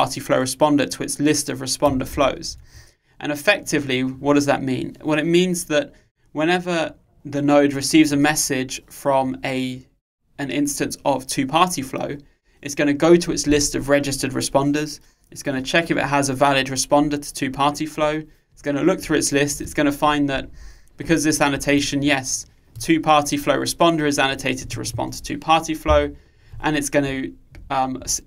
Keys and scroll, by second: 2.2 super+1.